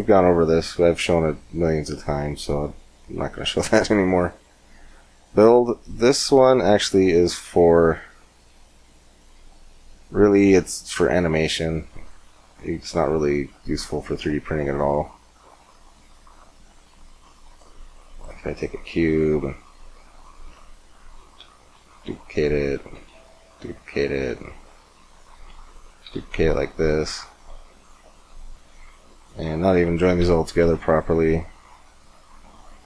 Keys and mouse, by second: 1.7-9.4 drag, 12.1 shift+a, 17.9 middle click, 18.3 g, 19.8 click, 20.1-21.5 middle drag, 21.6 shift+d, 22.8 shift+d, 24.1 shift+d, 25.2 middle click, 25.9 shift+d, 27.6 click, 30.3 ctrl+j, 31.5 middle click.